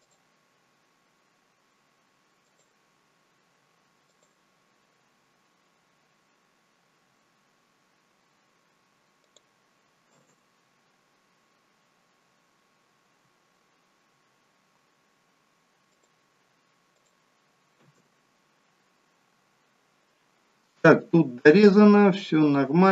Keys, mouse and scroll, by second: 14.6 k.